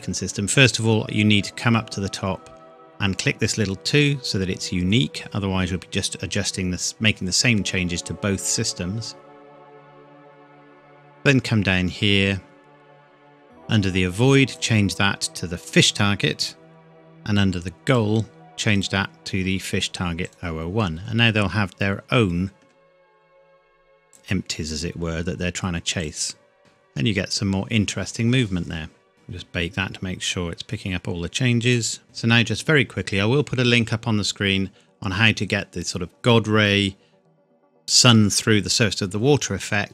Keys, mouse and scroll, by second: 4.0 click, 7.9 scroll down 1, 14.5 click, 23.1 click, 26.6 middle click, 26.9 scroll up 1, 29.1 click, 31.7 click.